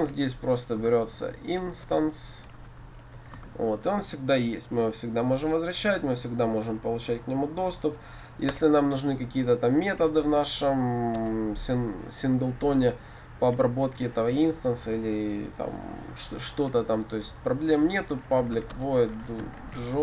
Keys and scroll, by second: 11.2 Return.